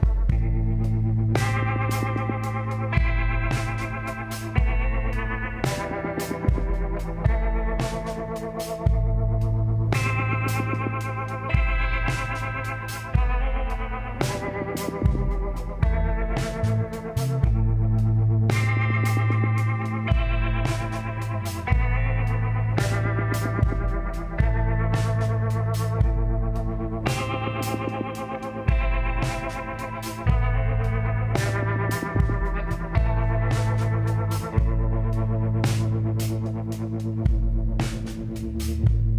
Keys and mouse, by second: 0.5 e, 2.0 s, 4.1-9.2 drag, 7.0 a, 10.8-14.7 drag, 14.7-16.9 middle drag, 16.9 click, 16.9 s, 19.7 s, 27.2-30.7 drag, 29.6 s, 32.5-33.9 drag, 33.9-36.7 middle drag.